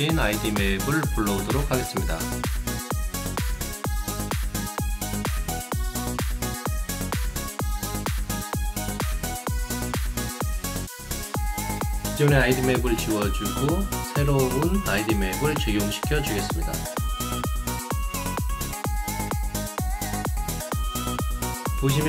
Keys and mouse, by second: 1.4 click, 2.8 click, 3.9 click, 12.1 click, 19.5-22.0 alt+drag.